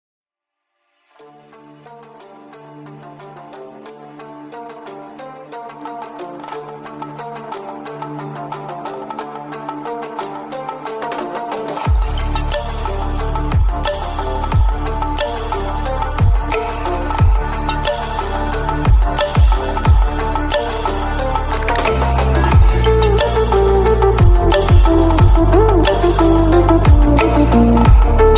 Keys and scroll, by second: 16.9 ctrl+0, 27.7 0.